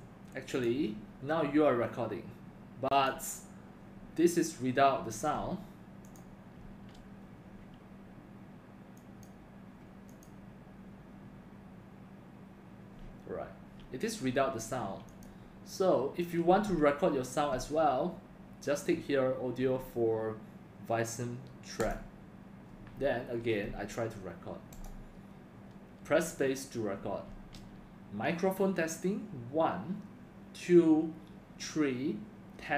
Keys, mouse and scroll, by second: 6.0 click, 6.6 space, 27.3 space.